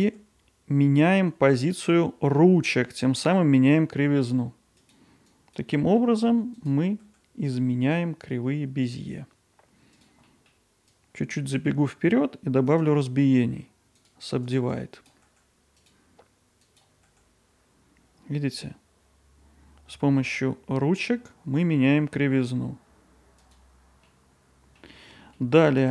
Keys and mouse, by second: 0.0 g, 5.4 click, 6.6 click, 7.0 g, 10.2 middle click, 10.9-12.7 drag, 12.7-14.8 right drag, 14.8 click, 15.3 g, 16.7 click, 17.1 g.